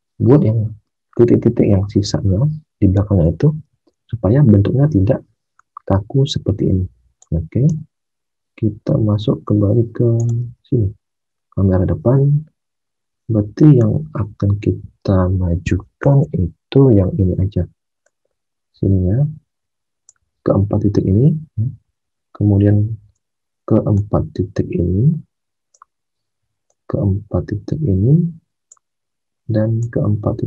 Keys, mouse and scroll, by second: 3.9 alt+Tab, 7.6 space, 10.5 space.